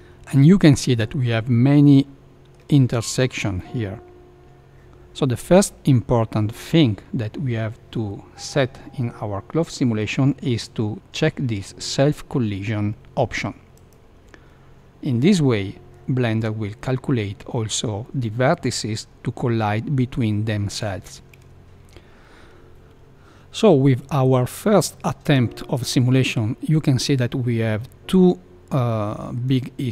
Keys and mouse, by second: 0.7-2.5 middle drag, 3.5-4.7 middle drag, 10.5 space, 21.4 shift+Left, 27.8-29.4 middle drag.